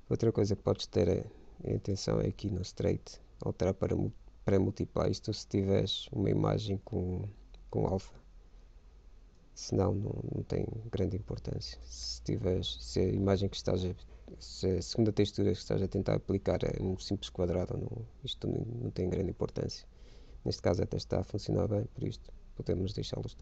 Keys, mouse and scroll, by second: 2.3-4.0 drag, 10.1-11.6 drag.